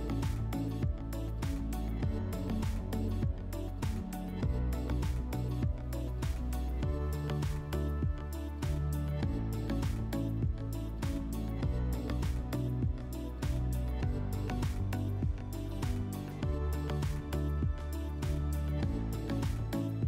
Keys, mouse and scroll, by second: 2.3-3.9 middle drag, 3.9 scroll down 1, 5.5 click, 6.7-7.6 typing, 8.4 Tab, 9.9-10.6 typing, 12.5 Tab, 12.8 Tab, 14.6-15.0 typing, 15.7 Return, 17.3 typing.